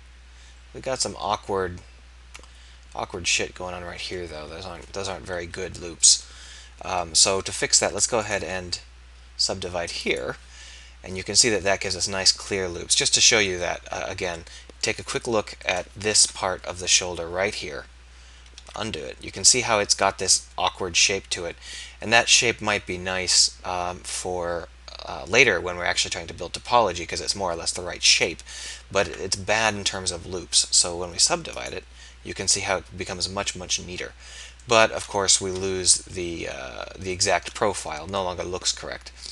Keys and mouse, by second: 5.7 KP_1, 10.9-12.0 drag, 16.2 KP_1, 18.5 ctrl+z, 35.5 KP_1.